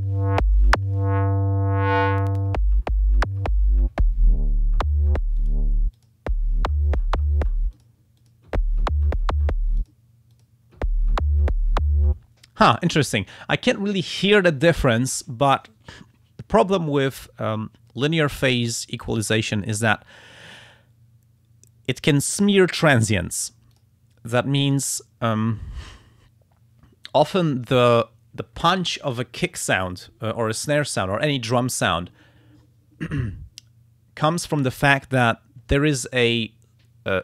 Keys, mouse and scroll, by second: 2.0 click, 5.4 click, 5.9 click, 7.7 click, 8.2 click, 9.8 click, 10.3 click, 23.7 click, 24.7 click.